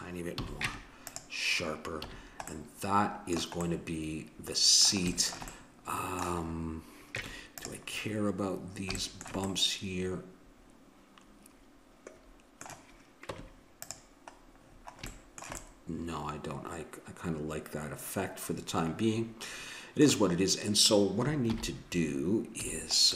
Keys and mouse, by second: 0.3 a, 0.7 Tab, 2.0 a, 7.2 Tab, 13.4 Tab, 21.5 alt+h, 22.7 a.